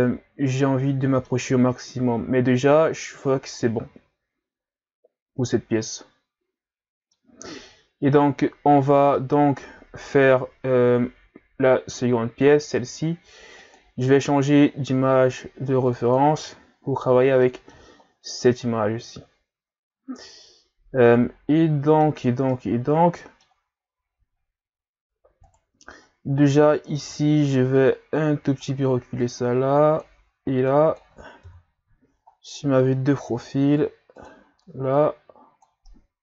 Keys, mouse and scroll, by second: 1.8 scroll up 2, 3.3-3.6 scroll down 4, 3.6-6.8 middle drag, 7.7-8.3 scroll down 3, 9.2-13.6 middle drag, 13.6-14.2 drag, 17.0-17.4 scroll down 2, 17.4 middle click, 18.0-19.1 scroll up 2, 20.5-21.5 scroll up 1, 21.5-24.4 middle drag, 24.4-25.5 ctrl+scroll up 5, 25.5 right click, 25.9 ctrl+scroll down 3, 26.3 Tab, 26.9 a, 27.1 a, 27.8-31.4 drag, 31.4 KP_3, 32.4-33.3 scroll up 1, 33.3 r, 35.0 click, 35.9-36.2 middle drag.